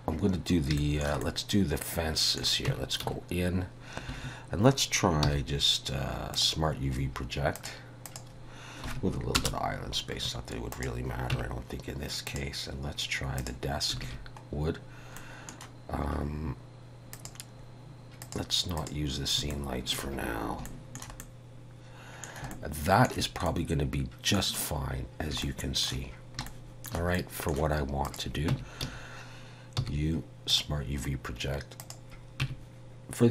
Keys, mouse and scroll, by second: 0.8 shift+middle click, 1.3 middle click, 2.8 Tab, 3.1 a, 3.3 q, 5.3 u, 11.4 Tab, 12.3 click, 14.1 alt+a, 14.9 scroll down 2, 15.2 middle click, 17.2 click, 19.6 shift+middle click, 20.3-20.6 scroll up 4, 20.7 shift+middle click, 21.3 middle click, 22.6 shift+middle click, 23.5 middle click, 24.9 scroll down 2, 25.4 shift+middle click, 26.5 shift+middle click, 27.2 middle click, 28.1 click, 28.8 Tab, 28.8 a, 29.8 u, 32.5 Tab.